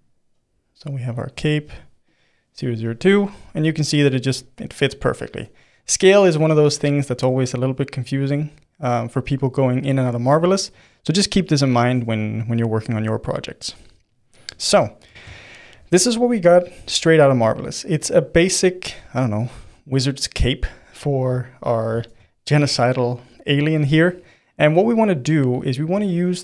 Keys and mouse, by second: 14.1-24.5 middle drag, 24.5 click.